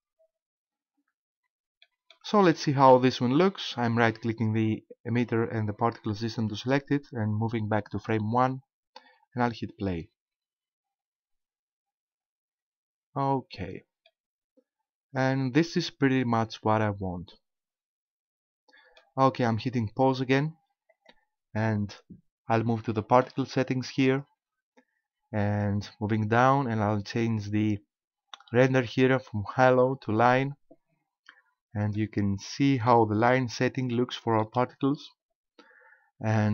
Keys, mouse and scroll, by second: 1.8 middle click, 2.5 shift+middle click, 5.1 right click, 8.0 click, 9.4 click, 14.1 middle click, 20.9 click, 24.0 click, 26.2 click, 30.2 click, 31.3-31.9 scroll up 3, 32.0 middle click, 32.9 middle click, 34.0 shift+middle click.